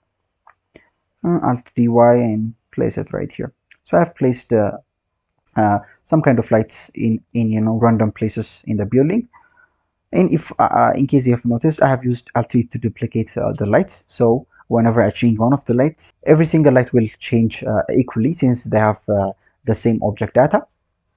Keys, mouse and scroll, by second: 0.3-0.7 scroll down 4, 0.7-1.6 scroll up 3, 1.6 alt+d, 3.1-3.9 scroll down 6, 3.9 drag, 5.8 scroll down 4, 6.7 drag, 7.4-8.2 scroll down 1, 8.2-8.6 scroll up 2.